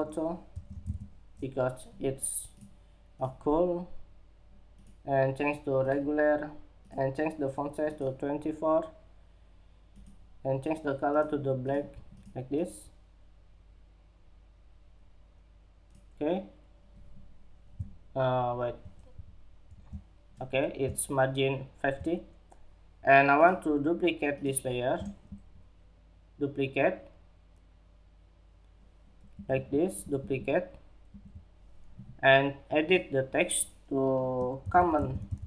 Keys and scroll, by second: 18.5 alt+shift+Down, 19.2 alt+shift+Down.